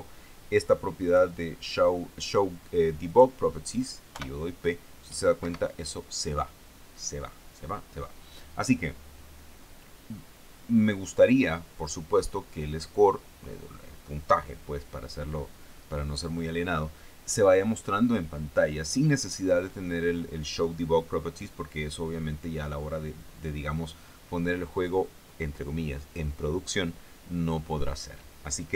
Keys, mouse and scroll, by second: 1.5 click, 3.5 click, 4.6 p, 5.9 Escape.